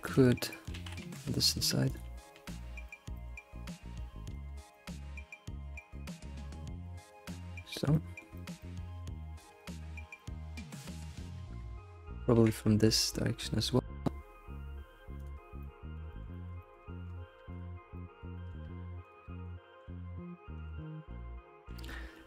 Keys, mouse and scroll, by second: 0.0 click, 0.5-0.8 shift+middle drag, 1.1 Tab, 1.4-1.9 scroll up 2, 1.9 click, 2.3 g, 3.1 alt+middle click, 4.3 ctrl+click, 4.5 scroll down 1, 4.9 middle click, 5.7 g, 7.3-9.0 middle drag, 9.2 middle click, 9.7 click, 10.0 scroll down 2, 10.2 shift+middle click, 11.1 ctrl+click, 12.3 g, 15.4 scroll down 3, 15.6-16.8 middle drag, 16.8-17.5 scroll up 6, 17.5 click, 17.7 scroll down 3, 17.9-19.0 middle drag, 19.0 ctrl+click, 19.3 middle click, 19.7 g, 21.7 ctrl+s, 21.9-22.2 middle drag.